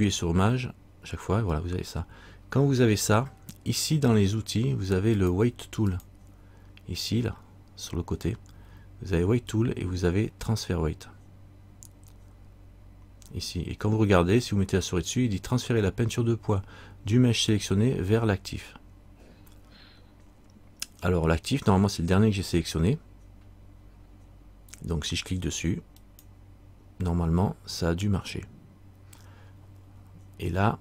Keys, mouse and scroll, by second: 5.3 click, 26.2 click.